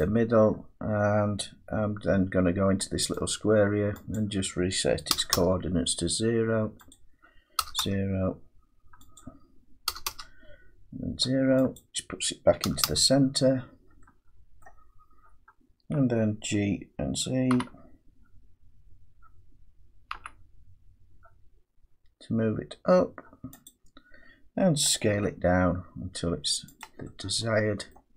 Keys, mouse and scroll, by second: 0.0 click, 3.1 click, 5.1 0, 5.3 Return, 6.9 click, 7.6 KP_0, 9.1 click, 9.9 KP_0, 11.7 click, 12.6 KP_0, 14.6 middle click, 17.5 g, 20.1 z, 23.6 click, 25.1 s, 26.8 click, 27.9 middle click.